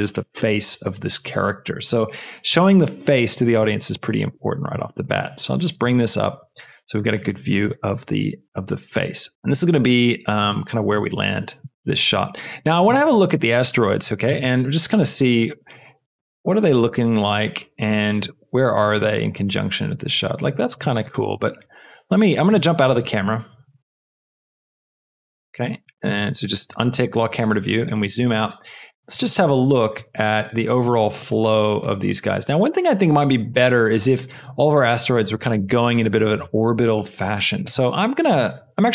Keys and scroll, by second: 14.3 space, 22.9 space, 29.9 shift+space, 37.6 space.